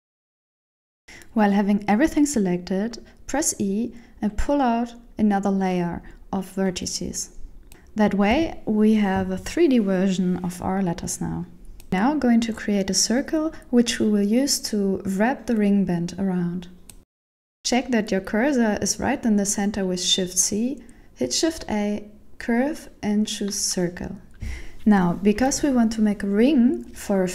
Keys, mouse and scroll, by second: 1.2 right click, 2.0 ctrl+l, 2.9 a, 3.7 middle click, 4.9 e, 8.6 KP_1, 11.4 middle click, 13.5 Tab, 14.0 shift+middle click, 14.8 KP_7, 16.2 scroll up 2, 16.9 Tab, 17.3 shift+middle click, 17.6 ctrl+alt+shift+Return, 18.5 shift+a, 25.0 click.